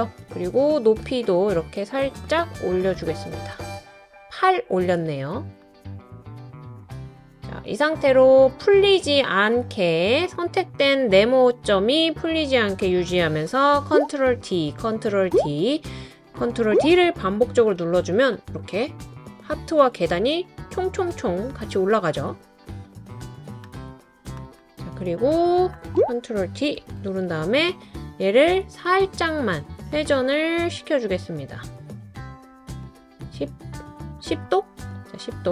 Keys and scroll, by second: 14.2 super+d, 14.7 super+d, 15.2 super+d, 26.8 super+d.